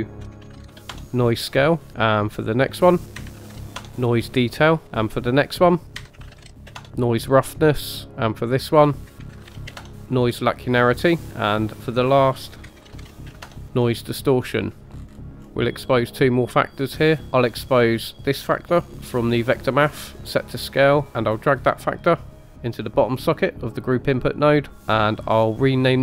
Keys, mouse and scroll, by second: 2.3 click, 2.5-3.9 drag, 5.6 click, 5.8-6.9 drag, 8.4 click, 8.6-10.0 drag, 11.4 click, 11.6-13.6 drag, 16.0 middle click, 18.2 click, 21.6 drag, 25.6 click.